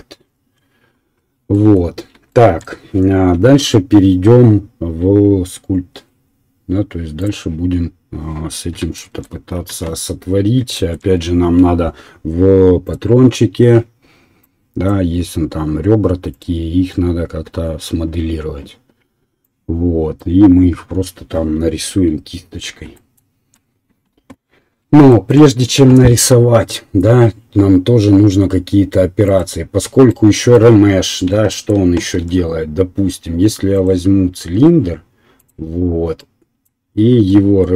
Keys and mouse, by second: 3.3 KP_1, 29.3 right click, 29.4-30.8 middle drag, 32.2 shift+a, 33.4-35.4 middle drag, 35.4-36.7 drag, 36.7-37.7 right drag.